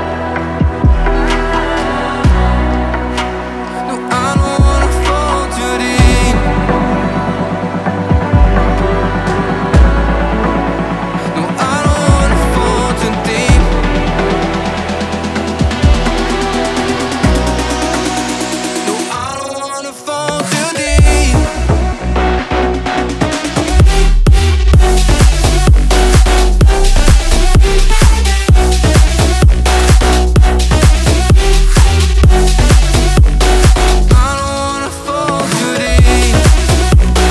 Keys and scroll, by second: 0.9 ctrl+s, 4.4 ctrl+s, 8.7 ctrl+s, 20.0 ctrl+c, 20.8 Return, 22.5 ctrl+v, 24.2 Return, 25.5 Return, 26.1 v, 26.9 ctrl+s, 35.1 b.